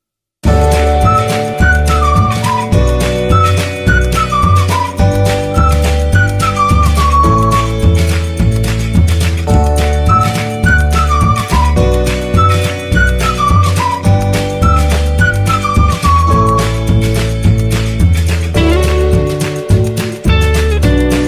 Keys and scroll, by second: 1.1 Escape, 2.7 F12, 7.8 Escape, 9.0 1, 9.2 z, 9.4 b, 11.5 ctrl+z, 12.4 z, 14.9 F12, 16.5 Escape, 16.9 ctrl+z.